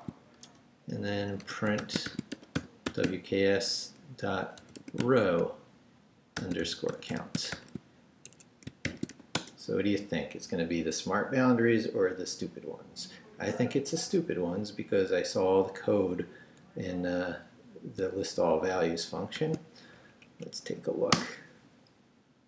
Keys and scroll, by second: 0.0-9.1 typing, 0.4 shift+Return, 8.3 shift+Escape, 9.3 Return, 19.4 shift+;, 19.9 shift+Up, 21.1 Return.